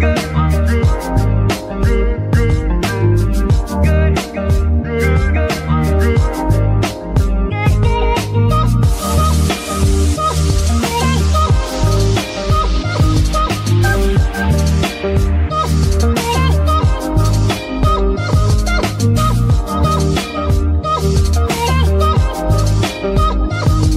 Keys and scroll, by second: 0.7 g, 0.7 y, 11.6 KP_1, 12.7 ctrl+r, 20.4 ctrl+r.